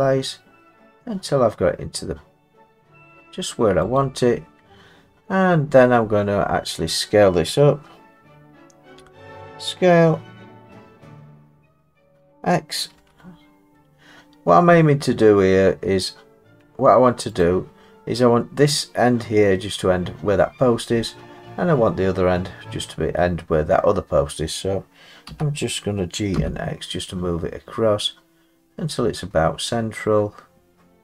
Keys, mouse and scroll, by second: 4.0 click, 6.3 middle click, 6.3-8.0 scroll, 8.0-8.9 scroll, 8.9 s, 12.9 x, 17.4 click, 25.3 g, 26.4 x.